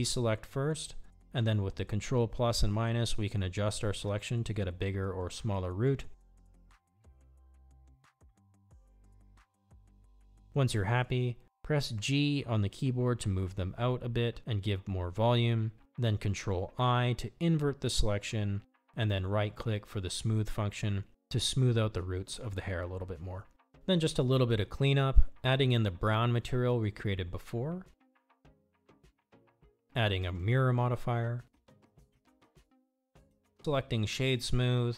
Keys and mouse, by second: 2.0 ctrl+KP_Subtract, 9.6 click, 11.8-12.9 middle drag, 13.7 g, 17.5 ctrl+i, 20.1-22.1 right drag, 22.5-24.5 typing, 24.5 Tab, 26.7 click, 27.9-29.5 drag, 30.3 middle click, 32.4-33.7 drag, 34.5-34.9 drag.